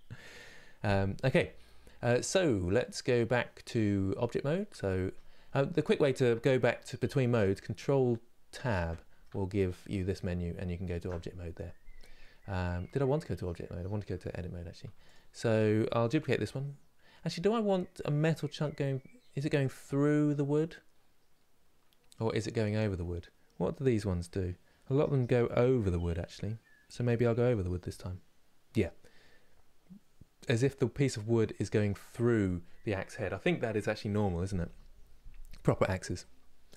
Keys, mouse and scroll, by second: 0.0-4.4 drag, 4.4 Tab, 10.8 ctrl+Tab, 12.6 Tab, 14.8 Left.